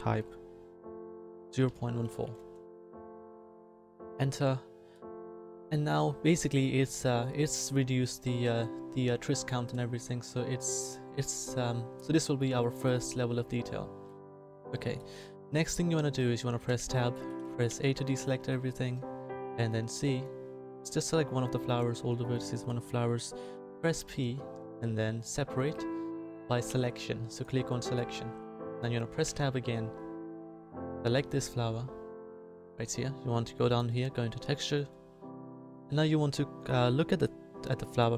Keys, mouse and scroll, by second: 11.9 middle click, 14.8 middle click, 16.6 Tab, 17.6 a, 19.4 c, 22.3-24.2 drag, 23.7 p, 28.0-29.2 drag, 29.2 Tab.